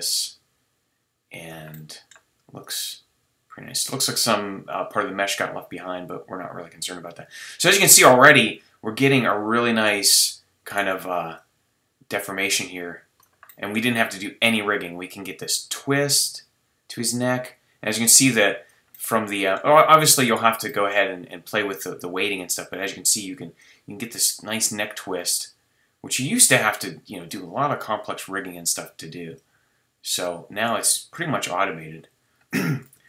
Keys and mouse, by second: 1.5 middle drag, 1.7 drag, 1.9-2.6 middle drag, 2.6-3.7 drag, 3.7 middle click, 3.9-4.3 drag, 4.3 middle click, 10.7-11.4 drag, 11.4-13.0 middle drag, 13.0-13.5 drag, 14.5-16.1 middle drag, 16.1-18.9 drag, 18.9-20.3 middle drag, 20.3-22.9 right drag, 21.3-24.2 drag, 21.3-22.9 middle drag, 24.2-25.0 right drag, 26.6-32.3 drag, 32.9 a.